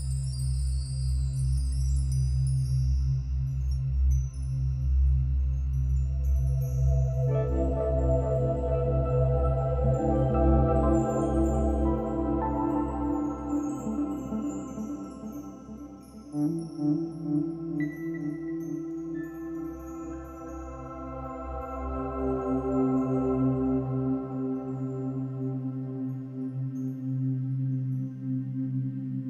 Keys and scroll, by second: 1.5 ctrl+d, 5.3 ctrl+-, 6.2 ctrl+=, 13.8 ctrl+=, 16.0 ctrl+-, 19.8 space, 21.8 ctrl+alt+g, 23.9 ctrl+-, 24.1 ctrl+=, 24.2 space, 24.9 ctrl+-, 25.1 ctrl+=, 25.2 ctrl+-.